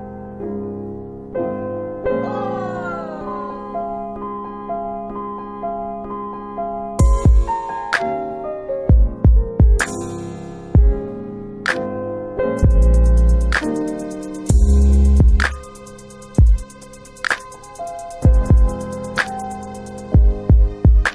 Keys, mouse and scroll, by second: 0.3 alt+click, 1.1 shift+right click, 5.1 shift+right click, 5.3 alt+click, 8.7 alt+click, 12.8 click, 20.1 click.